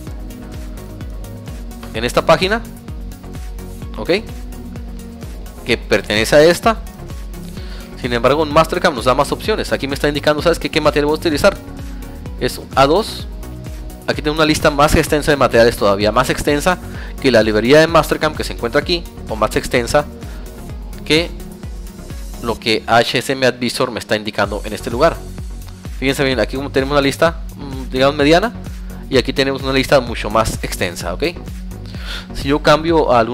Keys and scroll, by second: 5.9 Tab, 6.4 alt+Tab, 18.6 Tab, 20.4 alt+Tab, 27.3 Tab.